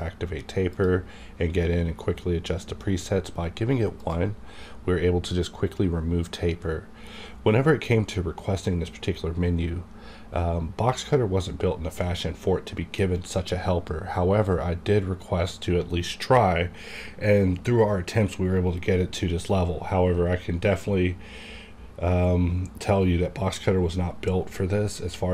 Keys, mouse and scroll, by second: 2.8 click, 6.1 click.